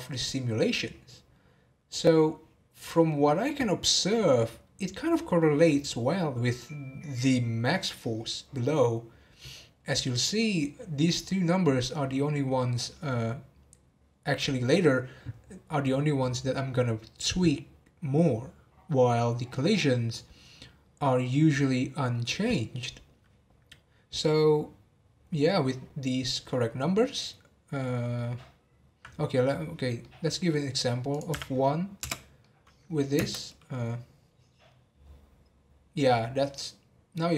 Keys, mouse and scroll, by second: 28.5-29.2 scroll down 3, 30.0-31.1 middle drag, 31.1-32.4 drag, 32.4-33.2 middle drag, 33.2 space.